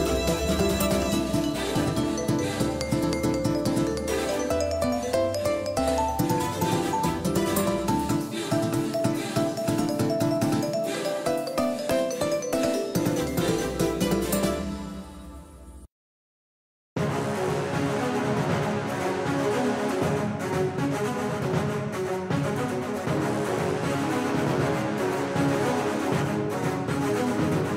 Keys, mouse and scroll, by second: 23.7-27.7 drag.